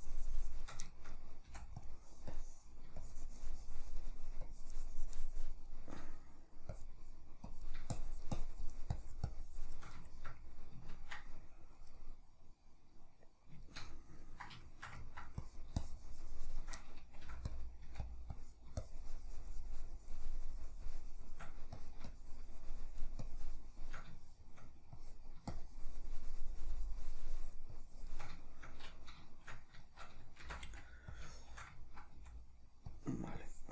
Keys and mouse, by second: 0.9-1.9 shift+middle drag, 1.5 f, 2.3-6.0 drag, 6.0 middle click, 6.7-10.0 drag, 10.0-15.4 shift+middle drag, 15.4-16.8 drag, 16.8 middle click, 17.2 f, 17.6 click, 17.9 f, 18.3-24.2 drag, 24.2 shift+middle click, 25.0-28.4 drag, 28.4-31.2 shift+middle drag, 30.5 shift+c, 30.7 f, 31.2 click, 31.4-33.0 shift+middle drag, 32.1 f, 33.4-33.7 drag.